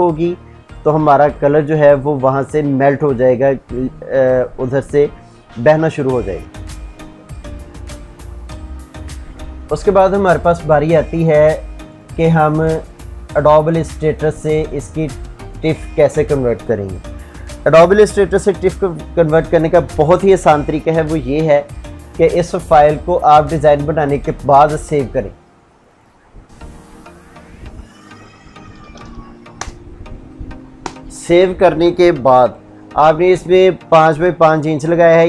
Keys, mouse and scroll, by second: 7.7 F9, 11.2 click, 20.4 ctrl+s, 22.9 click, 27.7-28.8 typing, 28.9 Return.